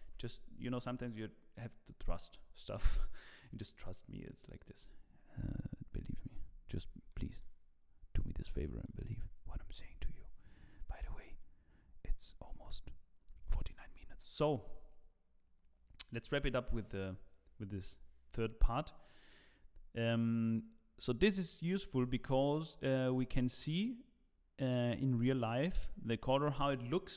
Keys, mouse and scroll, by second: 0.0 ctrl+s, 4.5 click, 6.4 scroll down 1, 7.0 middle click, 7.0-7.5 scroll down 4, 8.9 middle click, 9.5-9.9 scroll up 1, 16.2-19.2 scroll down 1, 19.7-20.4 scroll up 1, 23.0 click.